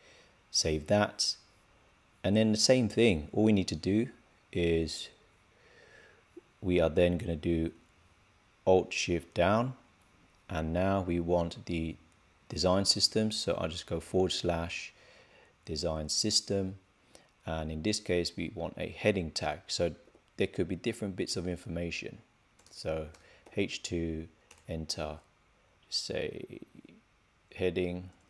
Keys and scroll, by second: 0.5 super+s, 19.6 shift+'.